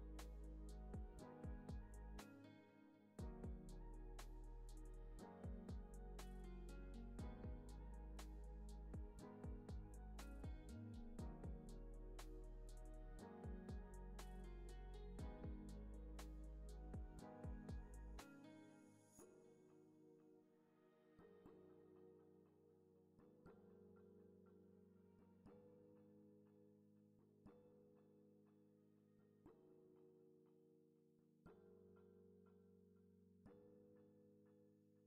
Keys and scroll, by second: 1.6-2.8 typing, 3.2 Left, 4.9 Up, 15.6 space, 21.6 space, 28.5 Left, 32.6 space.